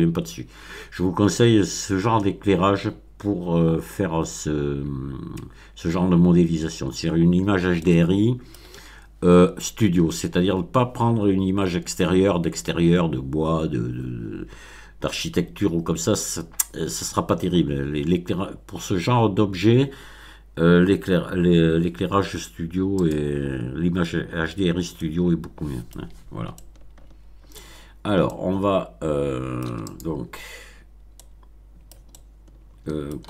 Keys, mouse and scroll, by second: 7.7-8.7 middle drag, 23.0 click, 23.8-24.2 scroll up 1, 24.2 middle click, 24.5 scroll up 1, 24.8-26.0 middle drag, 26.5-27.7 shift+middle drag, 27.8 shift+scroll down 1, 28.2-29.8 middle drag, 29.8 click, 30.4-30.9 scroll up 1, 30.9 scroll up 1, 31.1-32.0 middle drag, 32.1-33.2 shift+middle drag.